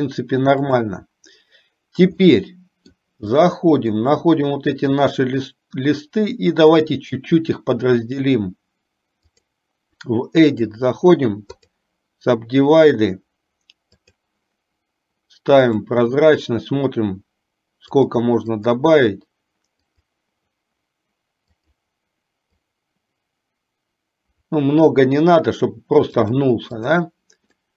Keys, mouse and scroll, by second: 1.0 click, 2.6 middle click, 3.7 shift+middle click, 5.0 click, 7.0-10.0 drag, 11.0-12.1 right drag, 14.1 click, 16.0 click, 18.0-22.0 drag, 22.6-25.0 drag, 26.2-27.2 drag.